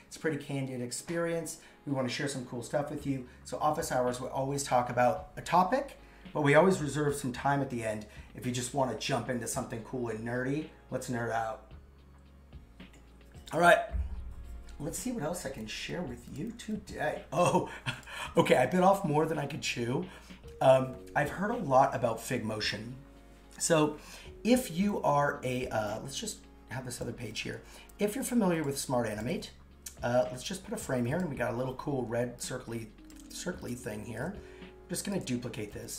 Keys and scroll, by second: 27.6 super+c, 29.3 super+v.